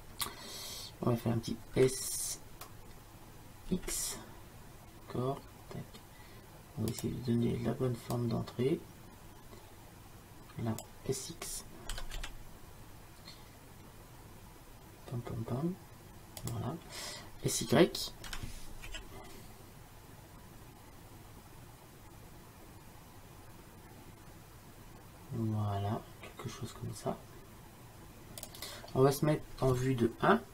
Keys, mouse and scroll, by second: 1.7 s, 8.2-10.5 drag, 12.0 s, 18.4 s.